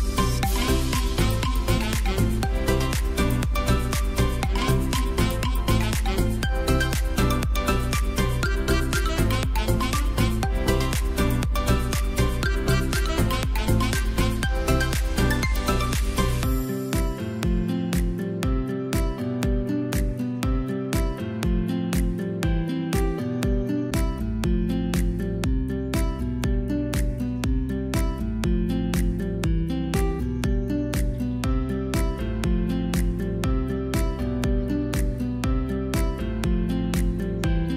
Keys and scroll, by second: 0.2 shift+x, 0.4 v, 1.8 i, 3.6 v, 4.9 i, 6.5 v, 9.9 v, 10.5 space, 13.3 ctrl+v, 13.8 space, 21.7 space, 26.9 space, 29.5 space, 35.9 space.